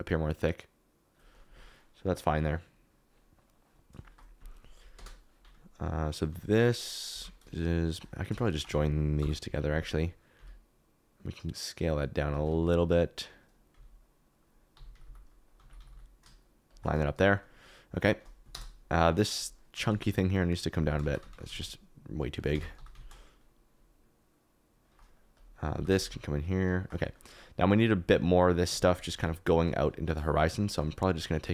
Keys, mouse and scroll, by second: 1.3 click, 4.0 shift+middle click, 4.9 KP_0, 6.2 s, 7.1 Escape, 9.1 ctrl+j, 10.3 s, 12.3 r, 12.5 x, 12.5 x, 13.7-15.8 typing, 17.2 middle click, 18.5 KP_0, 19.7 s, 19.8 z, 20.7 Escape, 21.0 Tab, 21.2 a, 21.3 s, 21.4 z, 22.3 click, 22.5 Tab, 22.7 g, 22.9 z, 25.1 click, 25.3 click, 25.7 g, 25.9 shift+z, 27.9 KP_Decimal, 28.4 middle click, 29.1 KP_7, 30.2 shift+right click, 30.6 shift+right click, 31.3 shift+middle click.